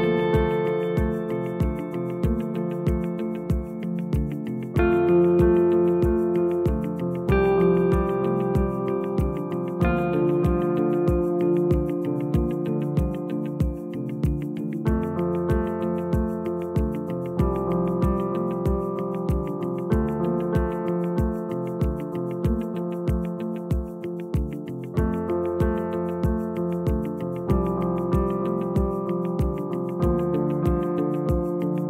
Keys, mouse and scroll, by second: 4.3 click, 5.1 click, 6.7 Tab, 8.0 a, 8.9 s, 10.9 Tab, 11.1 click, 12.2 click, 13.8 Tab, 14.4-16.1 scroll up 1, 16.1 click, 17.0 g, 19.2 click, 19.7 g, 22.2 click, 22.5 g, 23.9 click, 24.0 g, 25.5 click, 26.0 click, 26.1 g, 27.3 click.